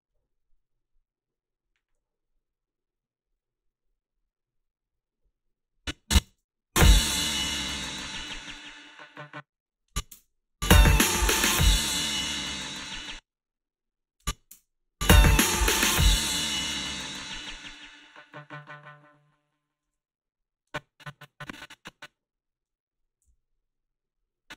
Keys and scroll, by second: 6.3 space, 9.1 space, 12.9 space, 14.6 space, 19.8 space, 23.3 g.